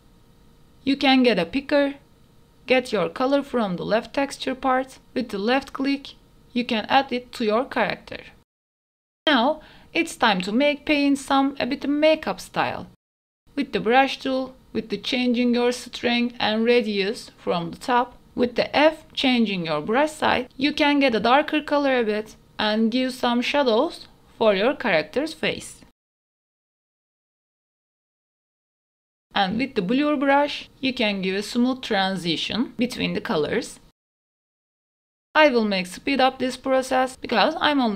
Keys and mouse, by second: 0.0 n, 1.4 e, 5.8 click, 6.8-8.7 shift+middle drag, 8.9 middle click, 10.1 shift+middle click, 10.8 shift+middle click, 11.4 KP_1, 12.0 middle click, 13.4 click, 14.6 click, 15.0 e, 16.2-17.6 shift+drag, 17.8 ctrl+z, 20.7 f, 22.0 click, 23.0-24.6 drag, 24.6 shift+middle click, 25.2 click, 26.3 click, 27.4 click, 27.7 shift+middle click, 27.9 click, 28.1 shift+middle click, 28.7 shift+middle click, 29.0-30.8 drag, 30.8 shift+middle click, 31.2 click, 32.1 click, 32.3 middle click, 32.8 shift+middle click, 33.0-34.4 drag, 34.8 click, 35.2 shift+middle click, 36.2 shift+middle click, 36.7 click, 37.5 shift+middle click.